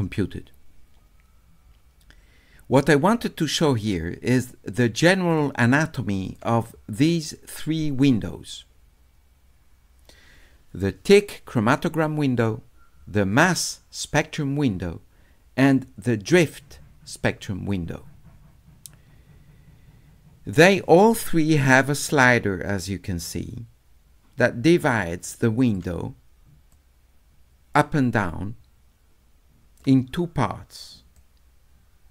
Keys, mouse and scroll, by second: 4.3 click, 5.3 click, 6.3 click, 13.5 click, 15.7 click, 21.9-25.7 drag, 26.7-29.8 drag, 31.2-32.1 drag.